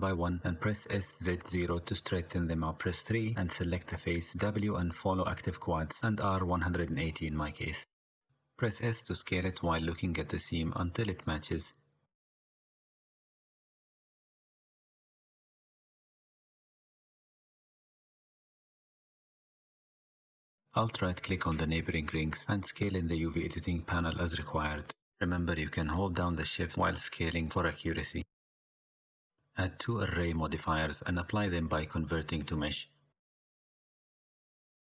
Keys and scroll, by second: 0.6 w, 2.5 a, 3.0 r, 6.1 s, 8.6 KP_3, 9.9 s, 13.5 Tab, 16.6 Tab, 17.6 s, 19.1 Tab, 20.2 Tab, 21.9 3, 22.5 1, 24.2 g, 25.8 alt+Tab, 26.5 alt+h, 28.1 Tab.